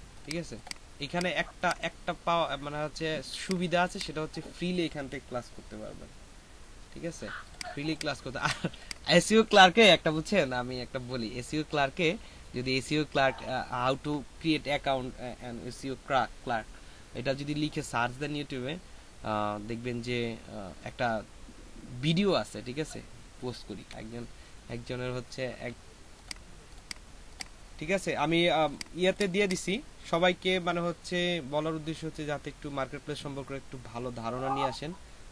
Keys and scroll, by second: 23.9 F7, 26.2 F7.